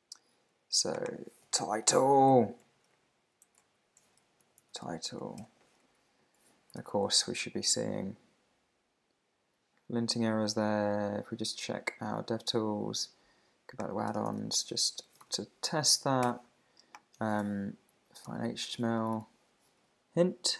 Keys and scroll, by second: 1.2-2.3 typing, 2.9 alt+shift+Left, 5.8 Down, 6.8 super+r, 11.6 super+`, 15.9 Down, 16.2 Return, 17.4 super+f.